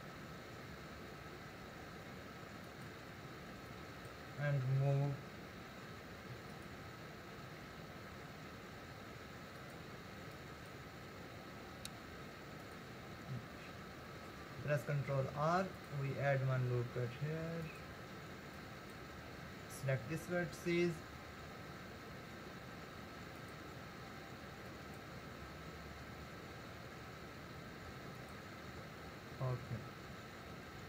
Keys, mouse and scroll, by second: 3.7 click, 5.5 r, 7.7 g, 10.4 click, 10.9 g, 15.3 ctrl+r, 18.6 click, 20.7 g, 24.7 click, 26.0 g.